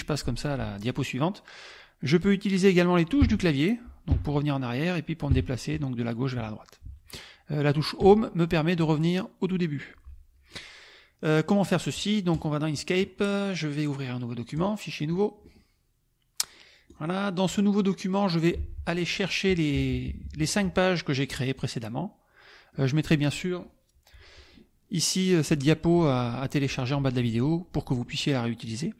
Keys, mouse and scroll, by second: 0.9 click, 3.2 Left, 4.1 Left, 5.3 Right, 6.4 Left, 8.0 Home, 12.3 click, 14.5 click, 15.1 click, 16.9 click, 18.6 alt+Tab, 19.7 KP_Subtract, 20.9 middle click, 21.6-22.9 drag, 28.2 middle click, 28.2-28.6 scroll up 1.